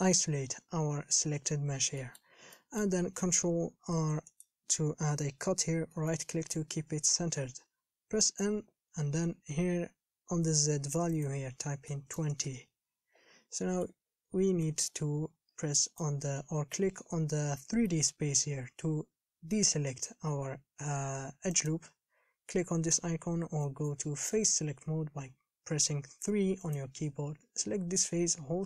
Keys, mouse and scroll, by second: 2.2 shift+middle click, 2.7 scroll up 1, 2.8-4.2 middle drag, 4.2 ctrl+r, 7.1 KP_1, 8.4 n, 12.7-13.8 drag, 13.8 middle click, 14.3-14.8 scroll down 3, 14.8 n, 15.1 scroll up 2, 16.2 click, 17.9 scroll up 3, 18.2-21.7 shift+middle drag, 21.7-27.0 drag.